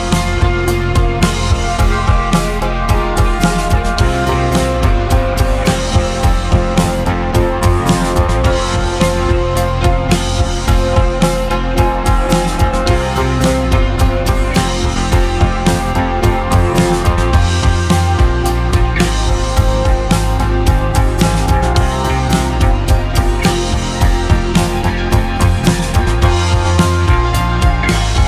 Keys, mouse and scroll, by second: 5.5 e, 8.6-11.1 middle drag, 11.5-12.1 scroll down 2, 12.1-14.3 scroll up 2, 14.3-16.8 middle drag, 18.3 Tab, 22.0 g, 26.0-27.3 middle drag, 27.3 Tab.